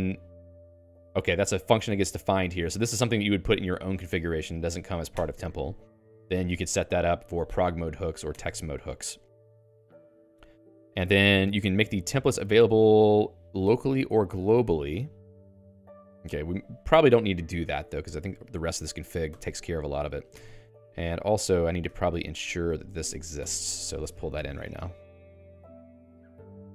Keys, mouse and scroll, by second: 0.0-7.1 typing, 8.4 Escape, 8.6-19.1 typing, 19.4 ctrl+alt+x, 20.2-23.3 typing.